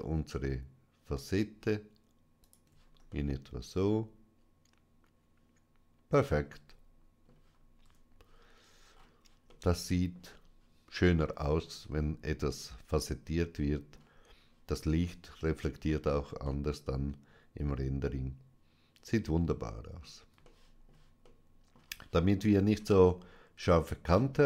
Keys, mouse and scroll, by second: 2.3 shift+click, 3.0-7.7 middle drag, 7.7 Tab, 8.7-9.3 scroll down 2, 9.5-11.1 middle drag, 12.2-15.1 middle drag, 16.3-20.2 middle drag, 21.1 shift+middle click, 22.6-23.1 scroll up 2.